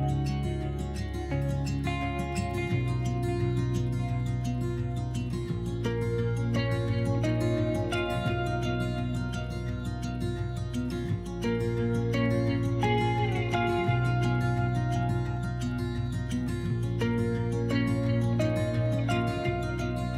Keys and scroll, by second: 2.2 s, 4.5-6.8 typing, 8.6 2, 11.4 4, 15.2 4, 15.6 s, 18.8 4.